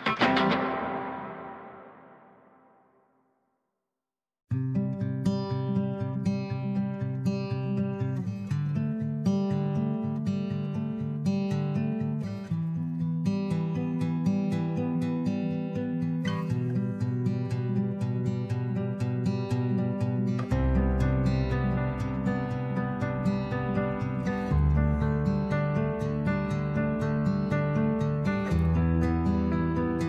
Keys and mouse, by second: 0.1 m, 5.4 shift+middle click, 11.0 g, 13.4 middle click, 14.2 e, 16.5 x, 17.1 click, 17.9 e, 19.5 click, 19.7 e, 20.9 click, 21.1 e, 22.2 click, 22.4 e, 23.6 e, 25.1 click, 25.3 e, 26.2 click, 26.4 e, 28.0 e, 29.2 click, 29.9 shift+middle click.